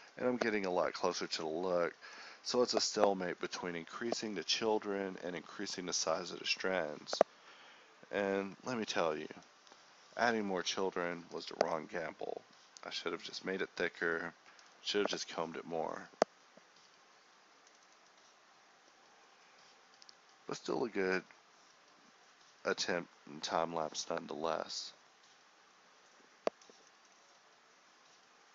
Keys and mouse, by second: 0.2 click, 1.1 KP_0, 3.1 ctrl+s, 8.1 click, 13.4-13.9 z, 15.1 click, 17.7 a, 19.1-20.4 drag, 22.1-23.9 drag, 23.9 f, 24.1-25.4 drag, 25.6 f, 25.9-28.5 drag.